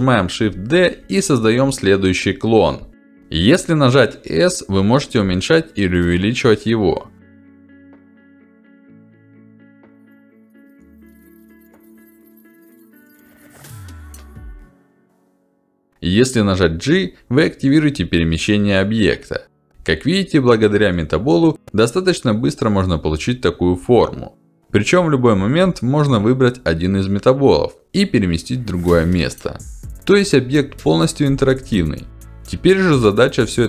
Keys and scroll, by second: 0.1 shift+d, 1.2 shift+d, 5.8 s, 13.0 shift+d, 14.4 s, 17.2 g, 20.2 shift+d, 21.5 shift+d, 30.8 g.